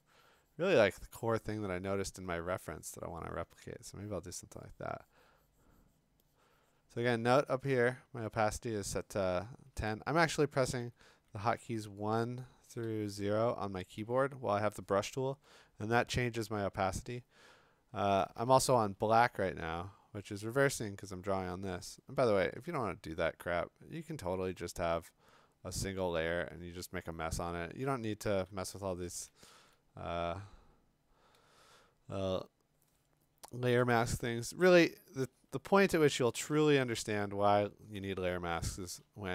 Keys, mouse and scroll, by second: 10.8-12.8 typing, 14.0 1, 16.9 ], 18.2 ], 18.7 ], 22.9 click, 24.2 click, 28.8 click, 28.9 ctrl+z, 29.5 ctrl+z, 31.1 click, 32.5 click, 33.5 click, 33.6 click, 33.7 click, 35.2 d, 37.9-39.3 typing.